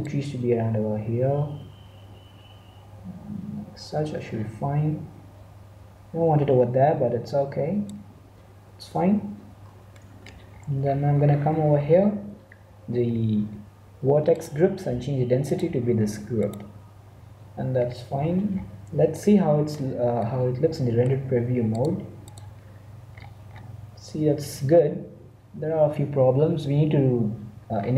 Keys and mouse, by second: 0.0-1.8 drag, 8.8 Tab, 9.2 Tab, 9.9 ctrl+Tab, 12.4-14.2 middle drag, 14.2-17.2 drag, 17.7 middle click, 21.6-23.5 drag, 23.5-26.4 middle drag, 27.8-27.9 middle drag.